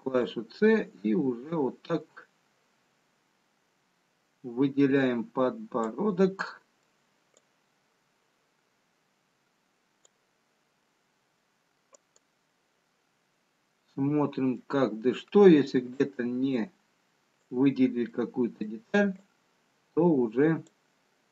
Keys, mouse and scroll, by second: 14.6 middle click, 16.8 c.